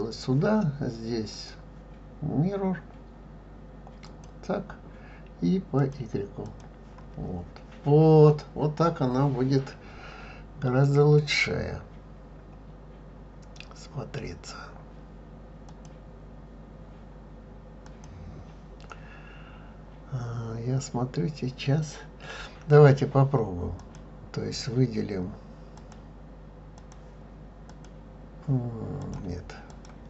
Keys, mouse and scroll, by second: 1.3-4.4 drag, 5.8 click, 6.4 click, 10.4-11.1 scroll up 3, 13.2 scroll down 1, 14.2-15.7 scroll up 1, 15.7 click, 17.9 click, 20.1 scroll down 1, 23.8 click, 25.8-27.9 drag, 29.0 click, 29.7-30.0 drag.